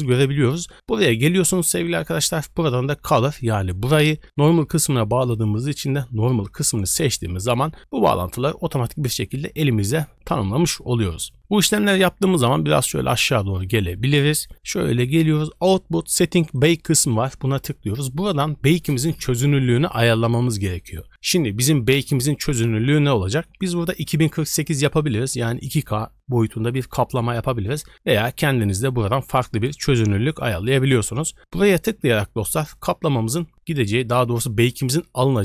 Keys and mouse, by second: 1.8 middle click, 13.7 middle click, 16.5 middle click, 23.9 middle click.